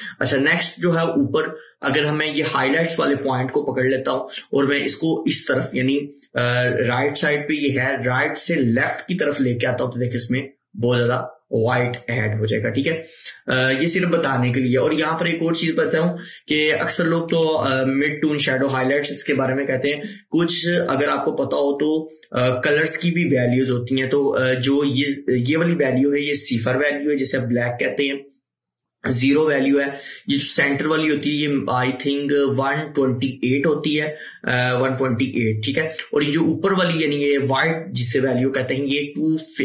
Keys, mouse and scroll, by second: 2.5-12.5 drag.